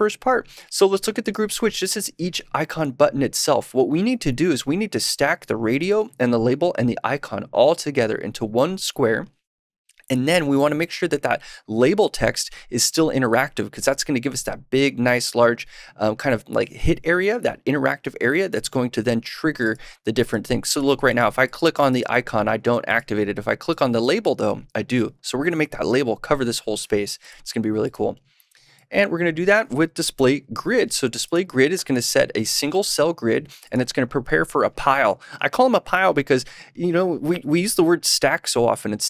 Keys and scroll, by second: 30.1 super+/, 30.7 super+s.